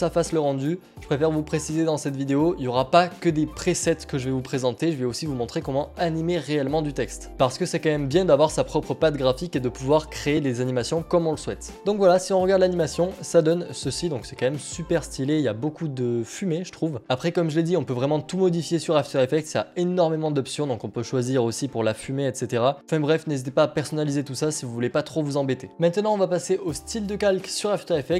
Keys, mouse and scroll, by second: 11.8 click, 17.5 alt+Tab, 17.7 alt+Tab, 19.3 alt+Tab, 21.1 alt+Tab.